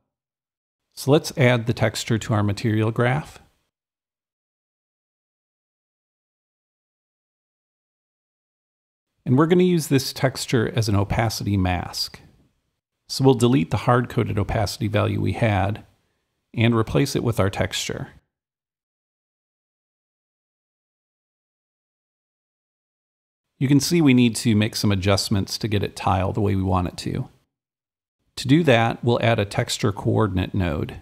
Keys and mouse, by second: 0.0-2.0 drag, 2.1-9.5 drag, 9.6-12.4 drag, 14.5-16.6 drag, 15.7 Delete, 17.9-20.9 drag, 22.0-23.3 right drag, 23.4-28.7 drag, 29.6-31.0 right drag, 30.0-31.0 typing.